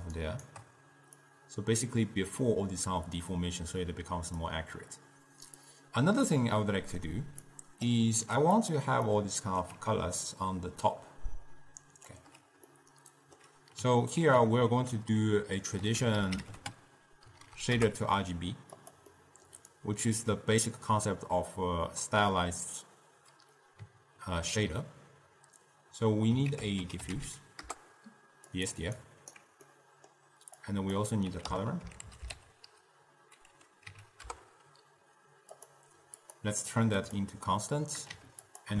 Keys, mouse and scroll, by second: 0.3 shift+right click, 1.3 drag, 3.1 click, 3.9 click, 5.7-6.7 drag, 6.7 middle click, 7.6 click, 8.3 g, 9.1 middle click, 9.9 d, 10.4-12.2 drag, 12.2-12.6 d, 12.8-14.3 middle drag, 14.3 ctrl+a, 17.5 Down, 19.3 middle click, 19.9-22.9 drag, 26.6 ctrl+a, 27.4 f, 29.3 alt+right click, 29.8 middle click, 30.8-33.9 drag, 36.3-38.7 drag.